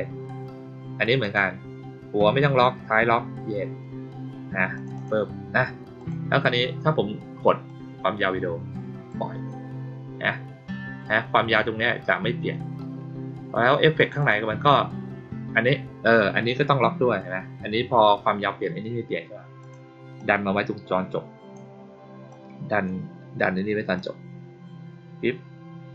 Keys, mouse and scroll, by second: 1.1 click, 4.7 click, 4.9 click, 5.9 click, 7.6-9.0 drag, 13.9 click, 14.1 click, 19.5 click, 20.1-21.5 drag, 22.2 click, 23.9-25.9 drag.